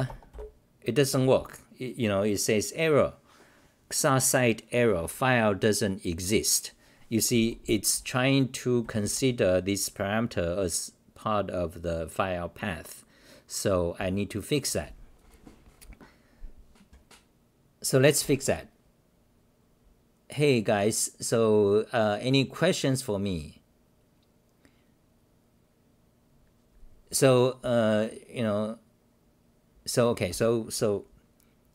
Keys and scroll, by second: 7.9-9.5 typing, 14.0 h.